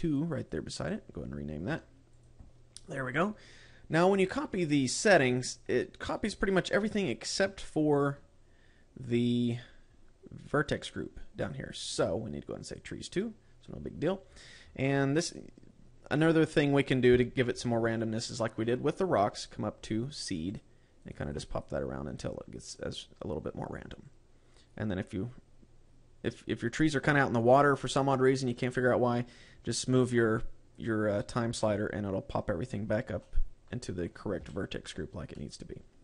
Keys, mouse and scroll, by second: 0.0 click, 5.7-7.2 scroll down 1, 7.2-9.7 scroll down 22, 9.7-11.9 scroll down 9, 11.9 click, 11.9 scroll down 2, 14.4-16.2 scroll up 13, 16.2 scroll up 5, 17.0-18.6 scroll up 9, 18.6 scroll up 2, 19.5-21.0 scroll up 9, 21.0 click, 21.5 click, 21.7 click, 22.0 click, 22.6 click, 23.1 click, 24.6 click, 30.0 click, 32.1-32.8 scroll down 2, 33.7 middle click, 34.9 KP_Decimal, 35.9 middle click.